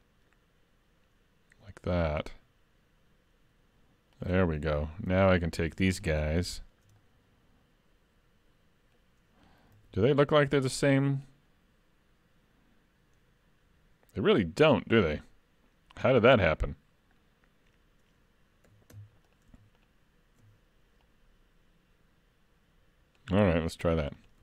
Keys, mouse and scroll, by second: 5.1 3, 5.4 click, 6.0 shift+click, 6.6 shift+middle click, 7.0 middle click, 9.8 alt+a, 10.2 middle click, 16.9-17.7 scroll up 1, 18.7 2, 19.3 alt+click, 19.8 alt+shift+click, 21.0 click, 23.9 3, 24.2 click.